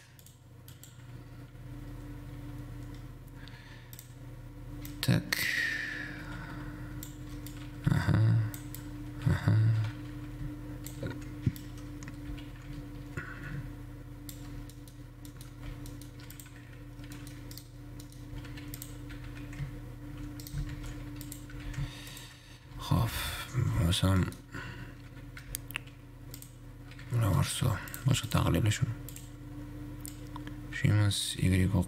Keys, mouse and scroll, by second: 0.4 drag, 0.9-3.9 drag, 4.2-7.4 drag, 14.9-15.9 middle drag, 15.9 Tab, 16.1 middle click, 16.4 2, 17.9 right click, 18.5 w, 18.9 w, 19.0 click, 19.4 g, 20.9 ctrl+shift+Tab, 21.9 g, 22.9 1, 23.1 a, 24.4 middle click, 24.9-25.6 scroll up 2, 25.6 m, 27.4 Tab, 27.6 middle click, 27.9 scroll down 3, 28.1 click, 28.4 x, 29.4-31.8 drag.